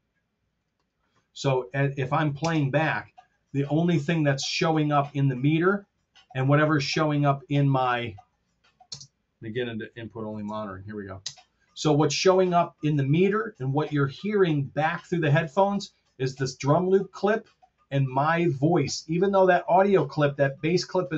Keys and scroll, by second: 2.4 space, 8.8 space, 10.2 alt+k, 11.2 space.